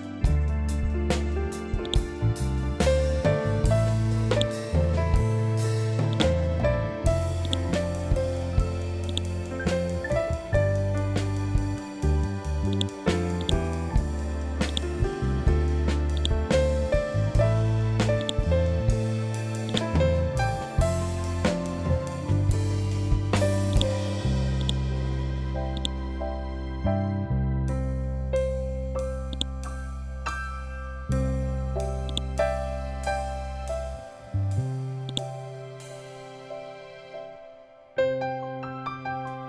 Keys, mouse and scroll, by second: 1.3 click, 2.2 scroll up 1, 3.8-23.2 drag, 23.2 ctrl+click, 25.2-28.8 ctrl+drag, 28.8-37.2 drag, 37.2 ctrl+z.